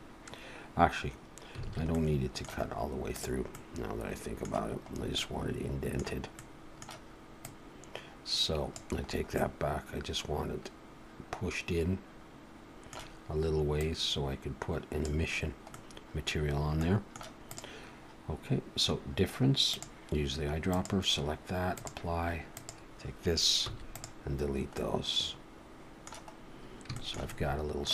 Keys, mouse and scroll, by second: 1.7 alt+a, 1.9 middle click, 2.7-3.2 scroll up 1, 3.2 click, 3.5 middle click, 5.0 scroll up 1, 5.1 middle click, 6.4 middle click, 7.4 click, 9.1-9.4 scroll up 3, 9.3 middle click, 13.8 click, 15.7 middle click, 16.4-16.8 scroll down 2, 16.8 middle click, 17.4 click, 19.7 click, 21.8 click, 22.6 click, 23.7 x, 24.4-24.8 scroll down 1, 24.8 middle click, 26.9 shift+middle click, 27.3 middle click.